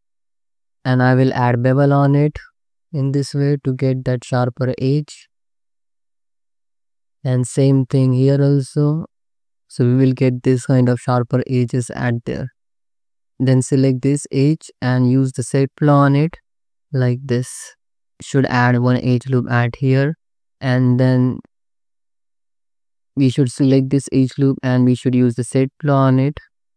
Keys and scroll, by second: 1.1 ctrl+b, 3.3 Tab, 3.9 alt+shift+z, 4.4 shift+z, 5.1 alt+shift+z, 5.4 Tab, 7.4 ctrl+r, 8.8 Tab, 9.3 alt+shift+z, 12.6 alt+shift+z, 13.2 Tab, 17.5 Tab, 19.0 ctrl+r.